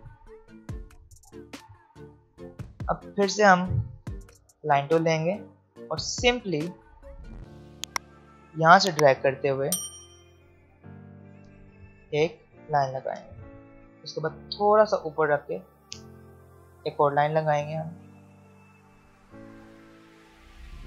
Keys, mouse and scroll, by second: 1.6 ctrl+x, 2.1 ctrl+z, 2.5 click, 4.3 alt+scroll up 2, 5.7 click, 10.5-15.2 drag, 16.5-20.8 drag.